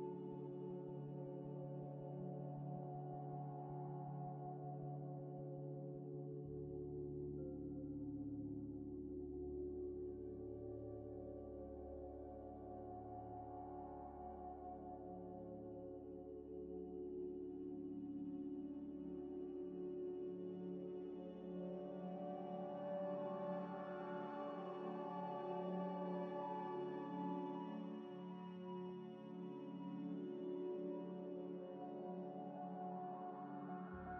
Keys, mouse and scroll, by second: 0.1 Return, 1.8 Tab, 2.2-6.5 typing, 7.1 scroll up 1, 8.4 g, 9.1 Tab, 9.5-14.2 typing, 14.5 ctrl+ق, 14.7 ctrl+double click, 15.1 double click, 15.2 double click, 15.5-19.0 typing, 17.9 Tab, 19.8 Delete, 20.4 Delete, 20.5 shift+a, 22.6 ctrl+z, 22.9-30.4 typing, 24.3 scroll down 1, 25.8 scroll up 1, 30.4 ctrl+ش, 30.8 ctrl+ش, 33.0 Tab, 33.7 1.